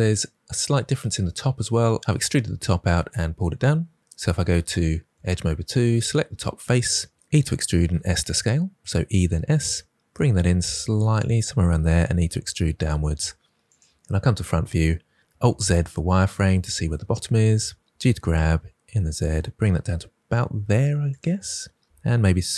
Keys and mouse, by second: 5.0 2, 5.9 click, 7.2 e, 7.8 s, 11.1 click, 11.9 e, 12.2 z, 13.6 click, 14.4 KP_1, 15.4 alt+z, 17.9 g, 20.6 z, 21.0 click, 21.7 s.